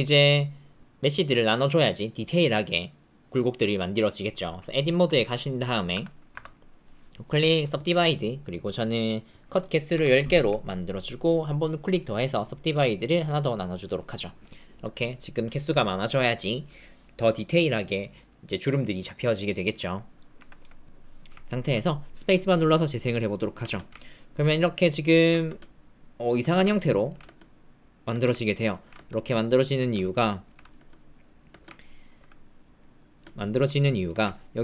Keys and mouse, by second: 0.1 middle click, 6.0 Tab, 6.7-7.8 drag, 8.5 click, 9.3-10.3 drag, 11.5-12.5 drag, 13.7 click, 20.5 Tab, 22.2 space, 23.6 space, 24.8 alt+middle click, 25.4-31.4 typing, 26.7 alt+click, 28.5 alt+click, 30.1 alt+click, 31.7 alt+click, 33.1 space, 34.1 space, 34.3 alt+click.